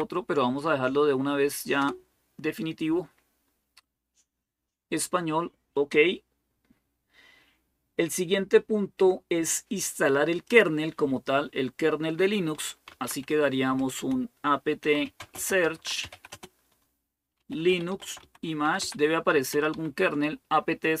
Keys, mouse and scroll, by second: 1.6 Return, 10.2 click, 12.4-20.0 typing.